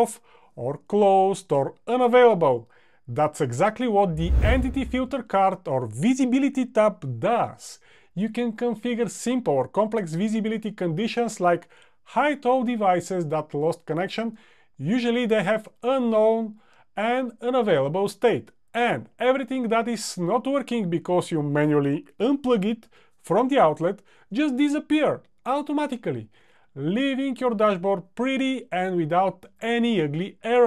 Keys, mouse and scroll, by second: 13.6 click.